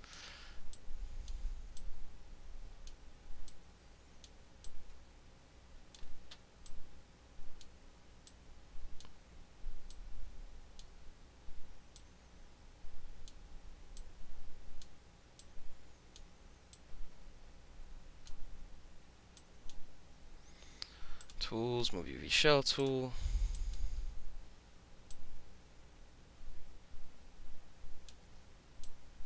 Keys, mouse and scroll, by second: 0.8-1.3 drag, 1.8-2.9 drag, 3.5-4.3 drag, 4.7-6.0 drag, 6.7-7.6 drag, 8.3-9.1 drag, 9.9-10.8 drag, 11.0 e, 12.0-13.3 drag, 13.4 w, 14.0-14.9 drag, 15.4-16.2 drag, 16.8-18.3 drag, 19.4 click, 21.3 click, 22.8 click, 23.6 drag, 24.0 e, 25.2-28.1 drag, 28.3 w, 28.9-29.2 drag.